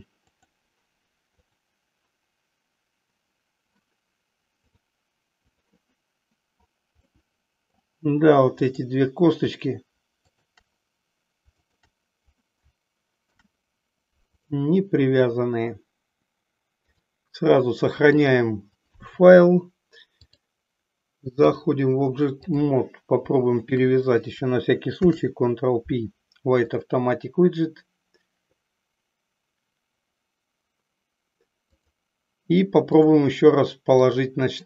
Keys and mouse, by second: 4.6-5.8 drag, 7.1 middle click, 8.6 click, 10.4 shift+click, 11.8 shift+click, 13.1 ctrl+p, 16.9-18.5 drag, 20.3-21.7 drag, 22.5 click, 23.8 shift+click, 25.0 ctrl+p, 32.9-34.1 drag.